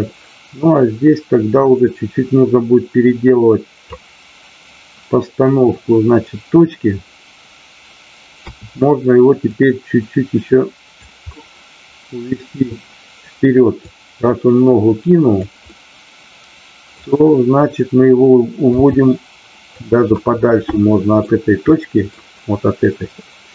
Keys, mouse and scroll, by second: 9.5-11.0 drag, 11.4-12.6 middle drag, 13.8-15.4 drag, 15.6-17.0 middle drag, 18.6 g, 19.7 click, 20.1-21.1 middle drag, 21.8-22.1 middle drag.